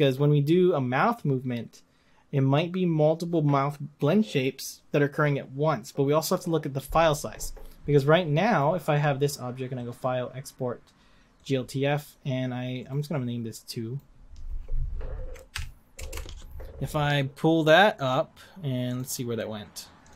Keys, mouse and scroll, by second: 11.5-16.4 drag.